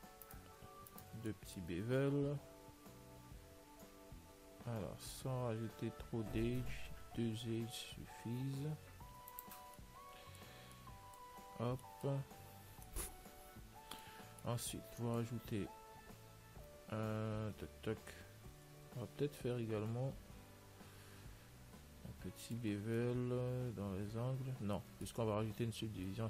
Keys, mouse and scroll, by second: 0.5-3.0 right drag, 1.6-3.6 middle drag, 3.0 ctrl+b, 10.1-11.6 middle drag, 11.6 a, 14.8 Tab, 18.6-21.6 middle drag, 19.0 Tab, 23.1-25.1 middle drag, 25.6 Tab.